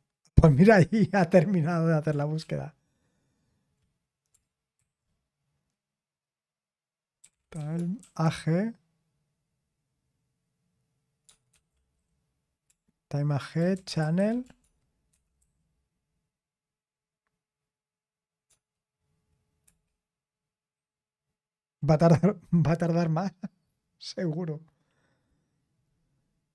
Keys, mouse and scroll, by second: 2.4 ctrl+p, 4.8 ctrl+c, 6.9-8.7 typing, 13.9-15.4 typing.